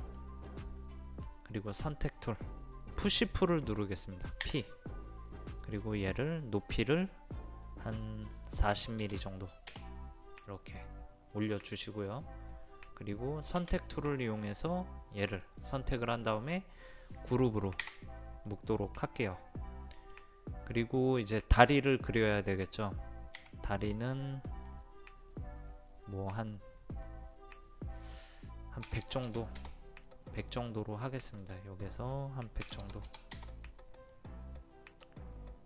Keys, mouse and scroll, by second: 0.2 middle click, 5.6 click, 8.7 KP_4, 9.1 KP_0, 10.6-12.0 middle drag, 12.0 scroll down 1, 12.2 scroll up 1, 12.4 scroll down 1, 12.5-13.9 middle drag, 13.9 space, 14.0 click, 17.8 click, 18.5-20.9 middle drag, 23.4 t, 23.8-24.9 drag, 28.9 KP_1, 29.0 KP_0, 31.7 click, 32.7 KP_1, 32.8 KP_0, 34.1 middle click.